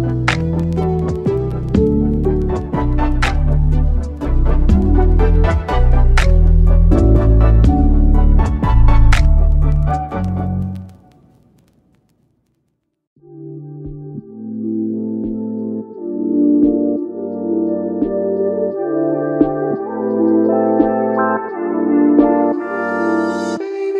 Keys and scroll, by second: 23.3 super+z, 23.7 super+z.